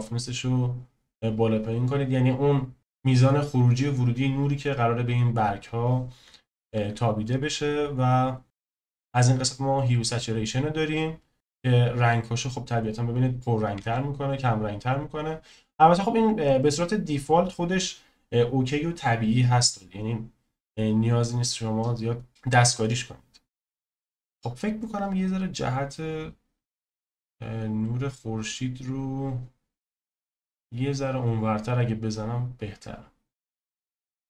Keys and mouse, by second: 6.8 ctrl+z, 11.5 click, 13.8 ctrl+z, 22.4 click, 25.1 click, 25.4 click.